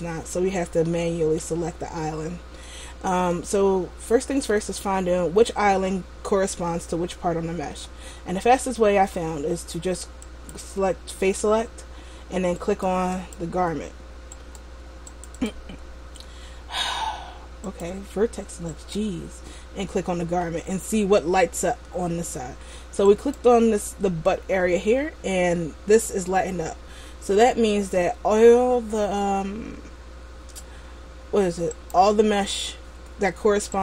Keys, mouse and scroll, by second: 1.1 middle click, 2.8 middle click, 10.4 click, 12.8 right click, 13.3 click, 14.5 right click, 15.2 click, 15.5 click, 17.9 click, 19.2 right click, 23.2 right click, 32.0 right click.